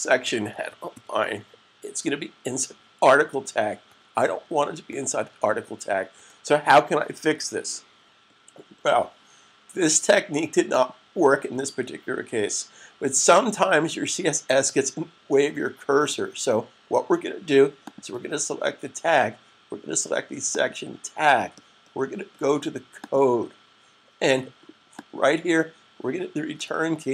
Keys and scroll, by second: 0.0-1.3 typing.